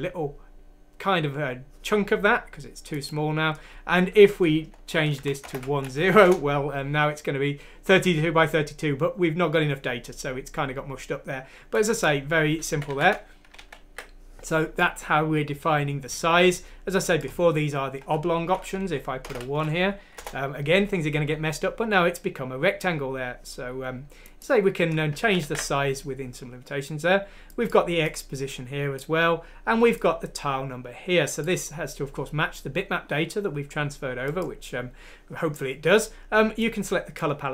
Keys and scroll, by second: 5.1 BackSpace, 5.5 1, 6.0 F6, 6.2 Return, 12.7 ctrl+z, 12.9 ctrl+z, 13.6 ctrl+z, 19.3 BackSpace, 19.8 F6, 20.4 F6, 20.4 Return, 20.4 BackSpace, 20.4 1, 25.2 ctrl+z, 25.4 ctrl+z.